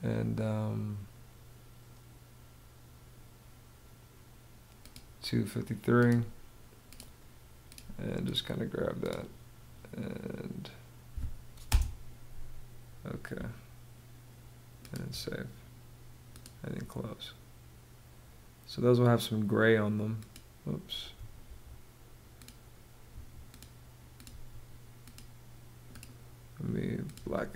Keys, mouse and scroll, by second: 11.2 space, 20.9 Escape, 22.6 Escape, 23.8 Escape.